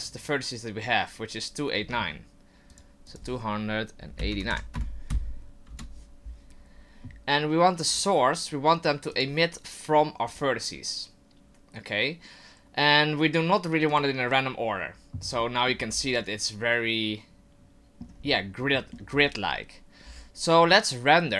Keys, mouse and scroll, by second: 1.8 Tab, 2.7 click, 3.5 click, 7.9 click, 9.9 click, 13.9 click, 15.4 middle click, 15.7-16.6 scroll down 5, 16.2 middle click, 18.2 scroll up 3, 18.6 middle click, 19.1 scroll up 2, 20.0-21.2 scroll down 2, 21.2 scroll down 1.